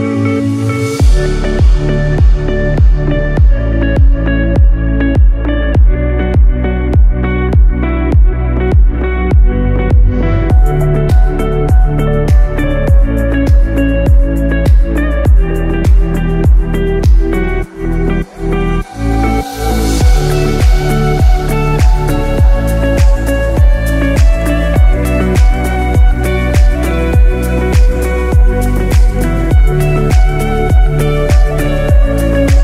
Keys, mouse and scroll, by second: 1.7 i, 2.5 click, 3.0-3.3 scroll down 2, 3.3 middle click, 3.8 scroll up 5, 4.3 scroll down 2, 4.7 click, 5.1-5.7 scroll down 3, 5.7 middle click, 7.7 click, 12.6 scroll down 2, 13.3 shift+middle click, 13.9 middle click, 15.5 click, 16.9 q, 19.1-19.6 scroll down 2, 19.6 scroll up 3, 20.1 shift+middle click, 20.7 middle click, 21.9 middle click, 24.8 click, 32.5 middle click.